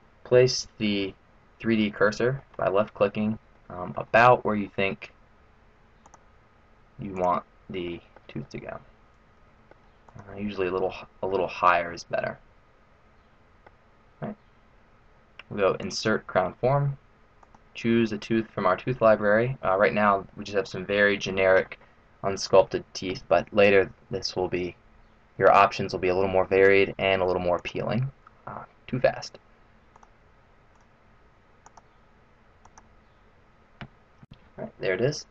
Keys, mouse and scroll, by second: 0.8 middle click, 2.9-3.4 scroll up 1, 3.5 middle click, 6.0 click, 7.2 click, 7.8 middle click, 8.4 middle click, 10.1 click, 10.6 middle click, 11.8 middle click, 15.8 click, 29.8 click, 34.5 middle click.